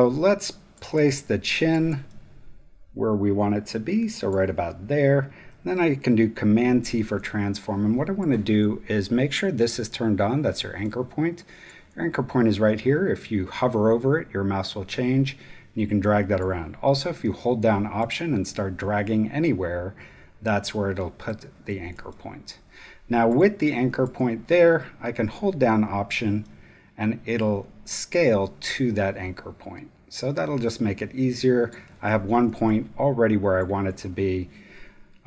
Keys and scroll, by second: 0.9 space, 6.5 super+t, 7.2 super+space, 8.0 space, 10.5 space, 21.9 alt+space, 22.7 space.